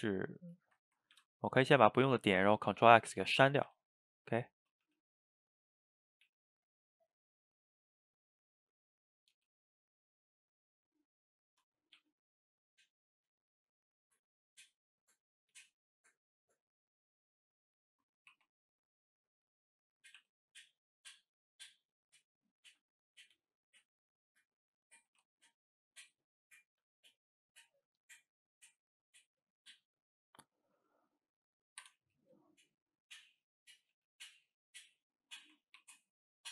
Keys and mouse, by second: 0.4 click, 0.6 shift+click, 1.2 ctrl+x, 1.8 click, 3.1 shift+right click, 3.4 ctrl+middle click, 3.7 ctrl+x, 4.6 click, 4.8 g, 5.6 click, 6.2 click, 6.3 g, 7.3 click, 7.6 middle click, 8.1 g, 9.2 click, 9.4 g, 10.3-12.0 middle drag, 12.0 g, 13.6-15.4 middle drag, 15.4 click, 15.6 g, 16.8 click, 16.8 g, 17.8 middle click, 18.3 ctrl+t, 19.6 middle click, 20.1 click, 20.2 e, 22.6 shift+click, 22.8 middle click, 23.4 g, 24.6-25.2 middle drag, 25.2 g, 26.0-26.7 middle drag, 26.7 click, 26.9 g, 27.8 click, 27.9 g, 28.6-30.8 middle drag, 30.8 g, 32.2-33.9 middle drag, 33.9 g, 35.2-35.8 middle drag, 35.8 ctrl+t.